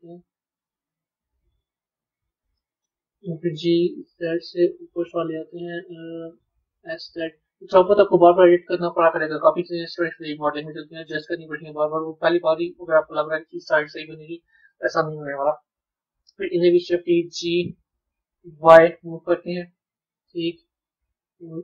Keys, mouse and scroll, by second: 10.1-11.7 middle drag, 11.7 click, 13.7 shift+click, 15.3 KP_3, 16.8 shift+d.